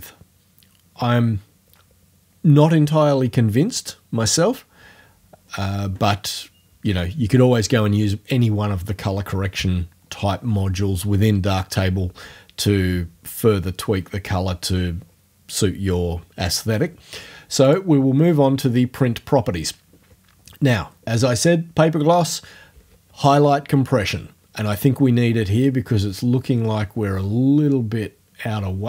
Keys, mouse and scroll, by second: 17.7 click, 26.0-28.8 drag.